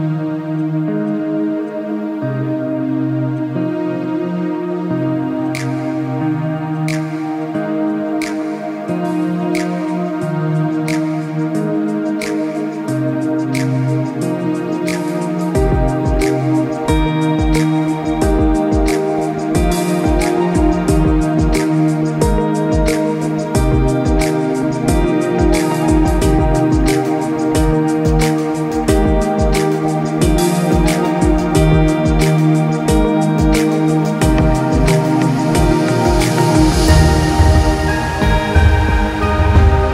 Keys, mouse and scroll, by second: 0.5 click, 1.1 click, 2.2-2.7 scroll down 1, 3.2 click, 3.8 Tab, 4.4 scroll up 3, 5.3 alt+shift+click, 5.8 middle click, 7.1 middle click, 7.4 alt+shift+click, 7.9 middle click, 8.3 alt+shift+click, 9.1 ctrl+z, 9.8 shift+click, 10.3 middle click, 10.9 alt+shift+click, 11.3 middle click, 11.8-12.1 scroll down 3, 12.3 shift+click, 12.7 middle click, 13.3 scroll up 5, 13.6-14.2 scroll down 3, 14.6 alt+shift+click, 15.1 middle click, 15.7 alt+shift+click, 16.3 middle click, 16.7 scroll down 2, 17.4 click, 17.8 click, 18.2 middle click, 18.7 click, 19.1 middle click, 19.8 shift+click, 20.4 alt+shift+click, 20.8 middle click, 21.3 shift+click, 21.6 middle click, 22.3 alt+shift+click, 22.8 shift+click, 23.1 middle click, 23.9 click, 24.3 click, 24.7 click, 25.0 middle click, 27.3 middle click, 28.1 middle click, 28.8-29.2 scroll up 3, 29.3 click, 29.9 shift+click, 30.3-32.3 shift+click, 32.3 click, 32.8 click, 33.1 scroll down 1, 33.3 middle click, 33.9 shift+click, 34.3 shift+click, 35.1 shift+click, 36.3 shift+click, 36.8 click, 37.0 click, 37.3 click, 37.7 middle click, 38.0 scroll down 2, 38.4 shift+click, 38.9 shift+click, 39.2 shift+click, 39.5 shift+click, 39.7-39.9 shift+click.